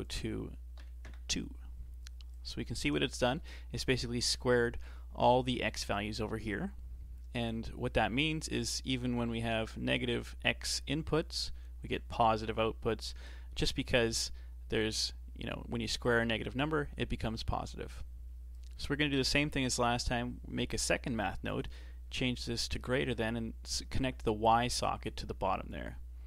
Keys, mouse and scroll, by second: 0.0-3.1 drag, 3.1-6.2 shift+middle drag, 16.0-19.7 drag, 19.7 shift+d, 21.5-23.1 drag, 25.0 click.